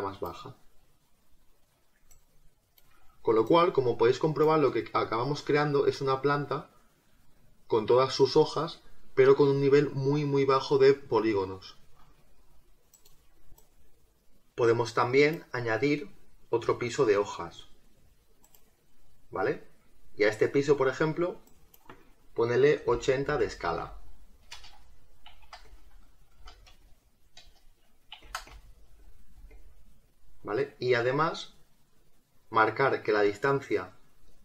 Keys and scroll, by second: 22.8 8, 23.2 0, 24.5 BackSpace, 24.7 Tab, 27.4 BackSpace, 27.5 Tab.